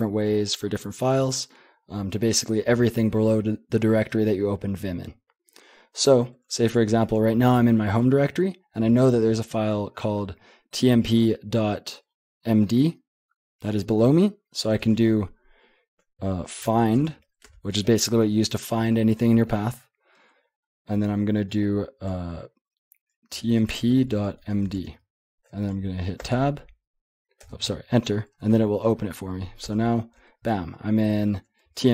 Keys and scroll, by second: 14.8 typing, 16.4-17.5 typing, 23.1-25.1 typing, 26.2 Tab, 27.4 Return, 29.6 Return, 30.5-31.6 j, 31.6-31.9 k.